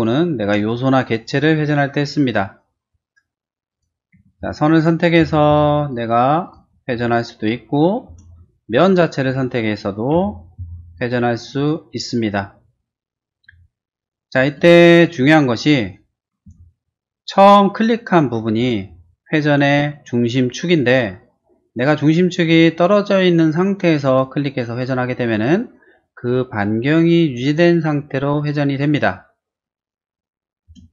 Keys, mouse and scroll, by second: 0.4 space, 3.7 click, 4.1 q, 5.2 Right, 5.8 Left, 5.8 click, 6.4 click, 8.0 space, 8.7 click, 9.3 q, 10.1 Right, 10.6 Left, 10.9 click, 11.4 click, 13.5 space, 14.0-14.5 scroll down 2, 14.8 middle click, 15.4 shift+middle click, 16.5 q, 24.1 click, 25.4 click, 30.7 space.